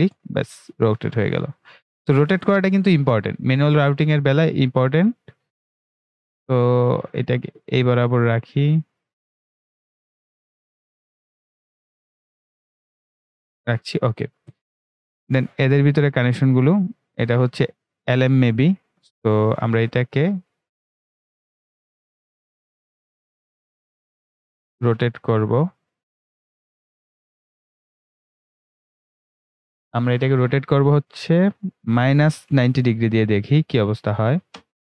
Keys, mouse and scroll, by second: 24.9-28.1 drag.